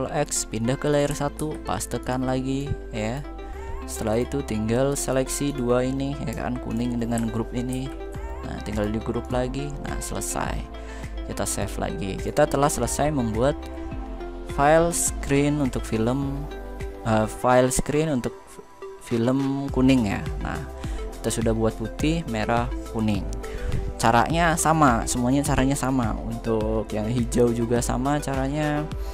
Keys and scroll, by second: 1.1 ctrl+v.